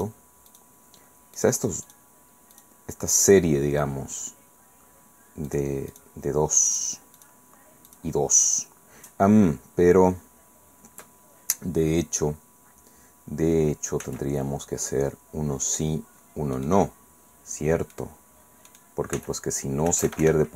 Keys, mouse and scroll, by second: 0.5 shift+right click, 1.4 shift+right click, 1.8 shift+right click, 2.5 shift+right click, 2.8 shift+middle click, 3.2 shift+right click, 5.5 shift+right click, 5.9 shift+right click, 6.7 shift+right click, 7.2 shift+right click, 7.9 shift+right click, 14.0 c, 15.6 middle click, 16.5 middle click, 16.7 click, 17.9 click, 18.7 middle click, 19.1 c, 19.9 Escape.